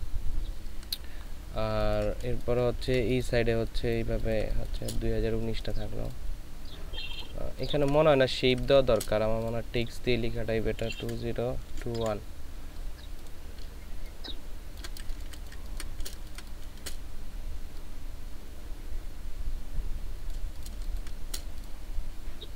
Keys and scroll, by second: 1.7 space, 2.9 ctrl+space, 7.6 ctrl+space, 10.8 KP_2, 11.0 KP_0, 12.0 n, 15.1 ctrl+shift+space, 16.2 c, 20.8 ctrl+space, 21.8 ctrl+shift+space.